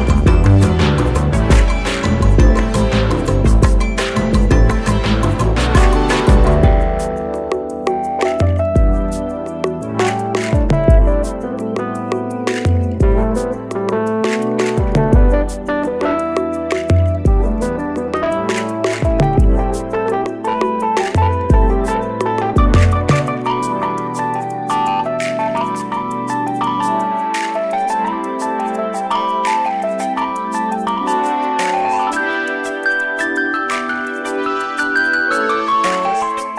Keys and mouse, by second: 1.1 right click, 2.9 click, 5.9 i, 6.8 click, 8.7 click, 11.1-12.7 drag, 18.8 click, 20.8-23.3 drag, 27.0-29.5 drag, 31.2 i, 32.5 click.